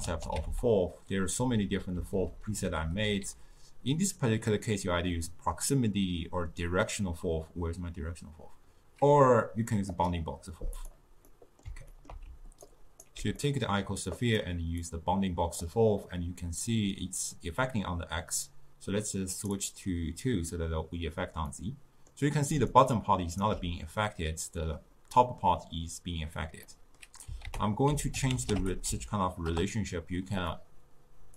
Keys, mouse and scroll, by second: 15.7-21.6 drag, 21.6-22.8 middle drag, 22.8 right click, 23.5 d.